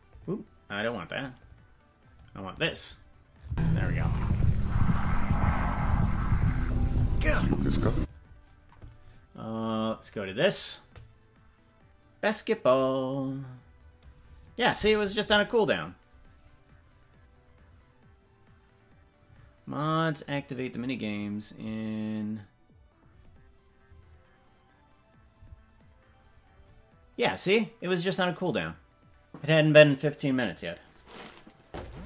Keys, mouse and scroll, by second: 3.4 space, 7.9 space, 10.2 click.